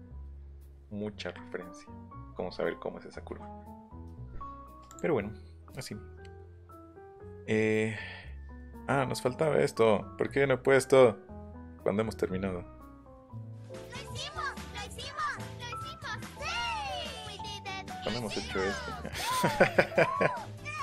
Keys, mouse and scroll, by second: 4.9 click, 14.9 middle click, 15.3 scroll up 1, 15.7 middle click, 18.2-18.6 scroll up 1, 18.6 middle click, 19.1 middle click, 19.5 scroll up 1, 19.8 middle click.